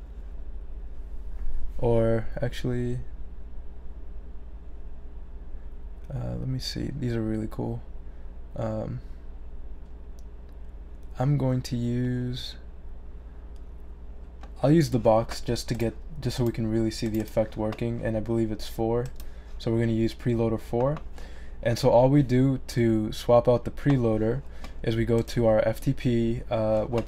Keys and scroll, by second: 18.8-19.6 typing, 25.8-26.5 typing.